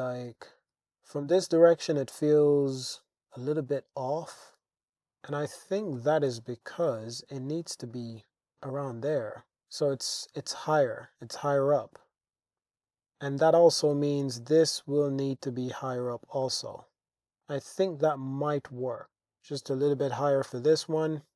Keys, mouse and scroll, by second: 0.7-1.2 middle drag, 3.6 click, 4.6 click, 4.9 Tab, 6.0 g, 6.3 z, 7.9 click, 8.9 click, 10.7 Tab, 10.9 click, 11.4 click, 11.8 Tab, 12.6 click, 13.9 g, 14.2 z, 16.1 click, 16.4 middle click, 17.2 g, 17.4 click, 17.8-19.2 drag, 19.2 g, 20.0 click, 20.3 shift+click.